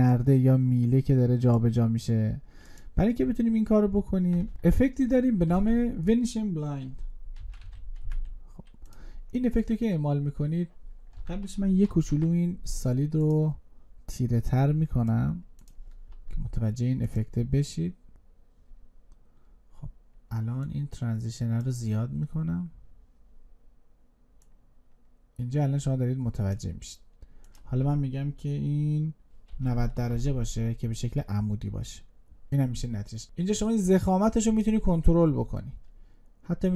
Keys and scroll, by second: 5.3 ctrl+space, 11.7 ctrl+shift+y.